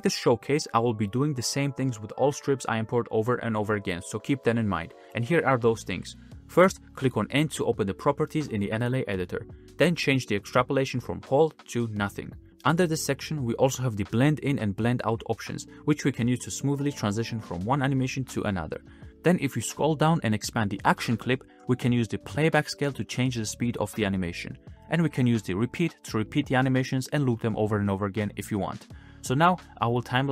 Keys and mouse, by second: 1.1-3.2 drag, 4.5 click, 5.0 space, 6.1 space, 6.3-6.6 drag, 7.7 n, 11.6-12.8 middle drag, 15.7-16.9 middle drag, 17.6-19.9 middle drag, 24.0 shift+middle click, 24.7 space, 25.9 shift+middle click, 28.4-29.6 shift+middle drag, 30.0 ctrl+z.